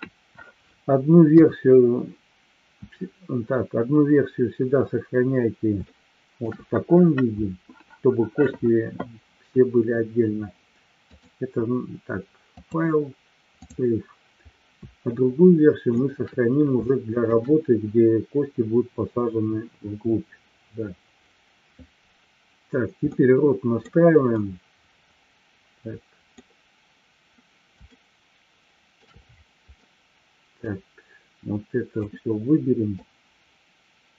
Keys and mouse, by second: 1.3 KP_3, 5.9-6.4 shift+middle drag, 11.1-12.2 drag, 12.5-13.8 drag, 15.2-15.8 shift+middle drag, 16.8-17.3 shift+middle drag, 23.1-23.8 middle drag, 24.4-26.4 middle drag, 27.9-28.9 shift+middle drag, 29.8-30.5 middle drag, 32.1 click.